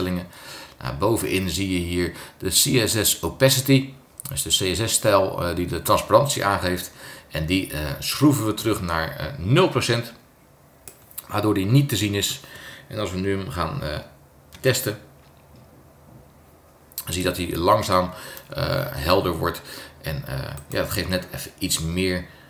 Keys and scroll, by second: 14.5 super+Return.